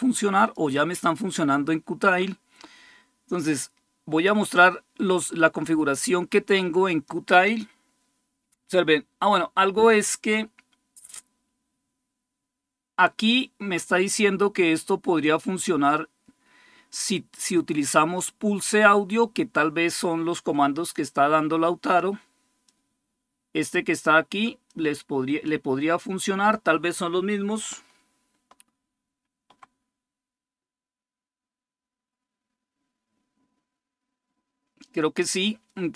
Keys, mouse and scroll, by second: 3.4-7.3 drag, 17.3-18.8 drag, 20.7-22.2 drag, 22.5-23.9 drag, 24.5-25.8 drag, 28.9 super+2.